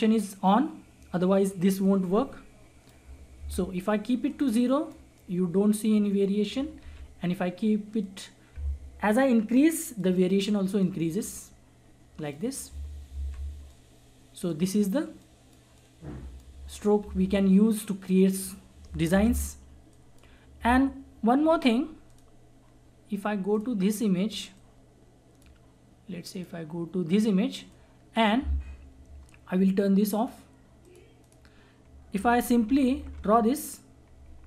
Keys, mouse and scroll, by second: 1.8-3.4 drag, 3.4 ctrl+z, 4.3-6.8 drag, 6.8 ctrl+z, 8.0-13.1 drag, 13.1 z, 13.8-17.0 drag, 17.0 ctrl+z, 18.1 click, 19.1 ctrl+z, 19.9 click, 19.9-30.1 drag, 25.1-25.5 drag, 28.0 click, 32.2-34.2 typing.